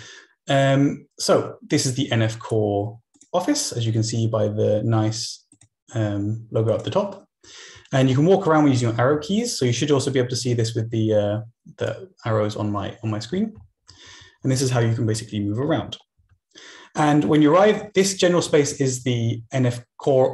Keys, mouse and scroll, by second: 1.8-3.0 drag, 3.2 click, 3.9 click, 6.1-7.7 drag, 7.7 Right, 7.9 Down, 8.0 Up, 8.2 Left, 8.8 Down, 9.2 Right, 9.3 Down, 11.9-12.9 drag, 13.3 Up, 13.5 Left, 13.8 Down, 14.0 Up, 14.1 Left, 14.4 Up, 14.7 Left, 15.0 Down, 15.1 Right, 15.3 Up, 15.5 Left, 15.7 Down, 16.1 Up, 16.8 Down, 17.6 Left, 19.3 Right.